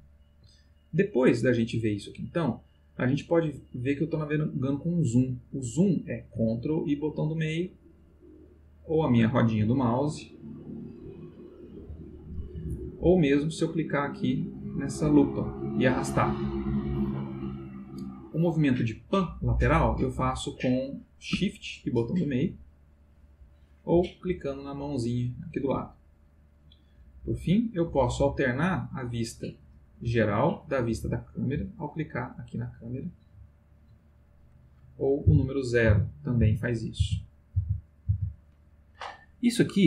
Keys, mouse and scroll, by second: 0.0-0.6 ctrl+middle drag, 1.1-2.7 middle drag, 3.0-4.3 middle drag, 7.1-9.3 ctrl+middle drag, 9.8 scroll down 2, 10.3 scroll up 2, 11.0-11.4 scroll down 2, 15.0-19.3 drag, 22.0-23.9 shift+middle drag, 24.8-28.0 drag, 30.0 middle click, 31.4 click, 33.0 click, 33.8 click, 34.3 click, 35.3 o.